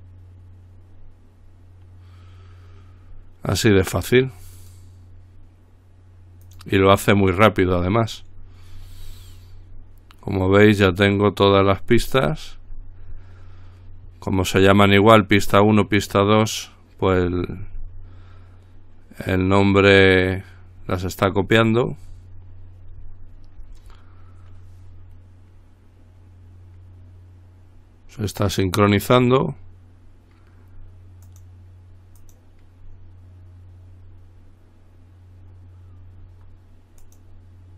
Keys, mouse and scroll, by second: 4.8 click, 6.6 click, 8.9-9.9 scroll down 1, 10.9 click, 12.5-13.7 scroll up 2, 13.7 scroll up 1, 17.6-18.6 scroll down 2, 19.8 click, 21.7-22.9 scroll up 2, 31.5 click, 32.4 click, 37.2 click.